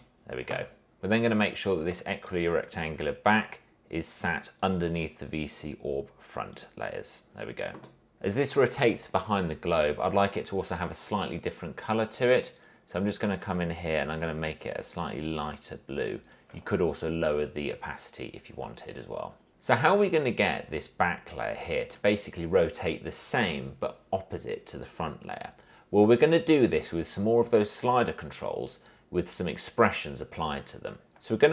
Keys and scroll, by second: 0.0-0.2 typing.